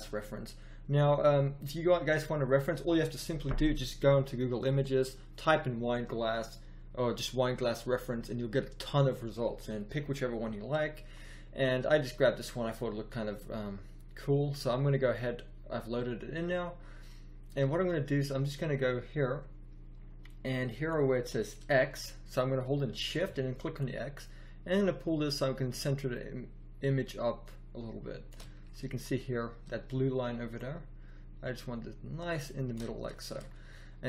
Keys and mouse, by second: 2.5 middle click, 17.9 middle click, 20.9-22.4 middle drag, 22.7 middle click, 30.5-31.9 middle drag, 32.4 middle click.